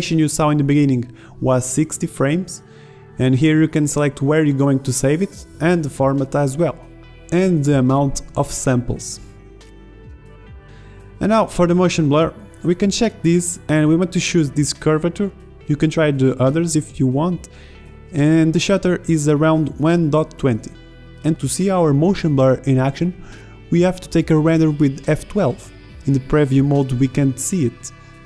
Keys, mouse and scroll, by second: 3.4-4.5 right drag, 4.5-5.5 drag, 6.7-9.4 middle drag, 11.9-22.7 middle drag, 23.1 alt+a, 24.0 alt+a, 25.2 alt+a, 25.7 alt+a, 26.6 middle click, 27.3 middle click, 27.4-28.0 middle drag.